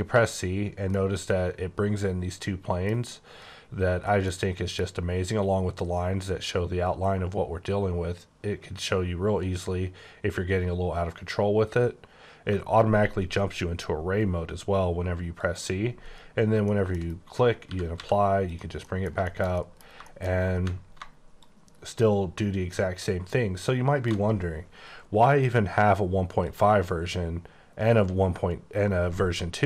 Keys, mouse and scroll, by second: 0.9 middle click, 4.3 middle click, 15.4 click, 15.8-16.7 scroll down 8, 16.7 shift+middle click, 17.0-17.6 shift+scroll up 4, 17.6-18.0 typing, 18.5 click, 18.8 middle click, 21.4 ctrl+shift+click, 26.4 click.